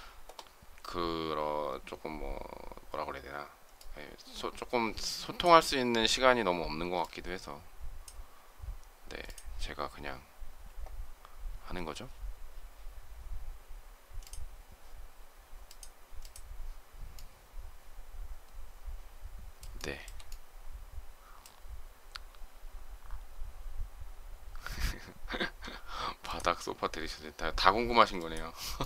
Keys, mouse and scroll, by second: 19.6 shift+middle click, 28.6 shift+middle click.